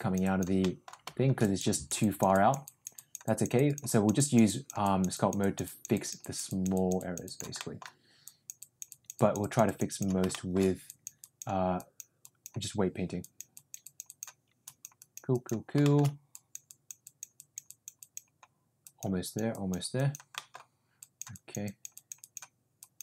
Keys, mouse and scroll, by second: 0.2 click, 0.6 middle click, 1.4 click, 1.6 click, 1.9 click, 2.3 click, 2.6 click, 2.9 click, 3.2 click, 3.5 click, 3.8 click, 4.1 click, 4.4 click, 4.8 click, 5.1 click, 5.3 click, 5.9 click, 6.2 click, 6.4 click, 6.7 click, 7.2 click, 7.5 middle click, 8.2 click, 8.5 click, 8.8 click, 9.1 click, 9.6 click, 9.8 click, 10.3 shift+middle click, 10.8 click, 11.2 click, 11.7 click, 12.2 click, 13.1 click, 13.5 click, 13.8 click, 14.0 click, 14.6 click, 15.0 click, 15.3 click, 15.8 shift+middle click, 16.3 click, 16.7 click, 17.0 click, 17.4 click, 17.6 click, 18.0 click, 18.8 click, 19.2 click, 19.5 click, 19.9 click, 20.3 middle click, 20.9 click, 21.3 click, 21.6 click, 21.9 click, 22.2 click, 22.7 click.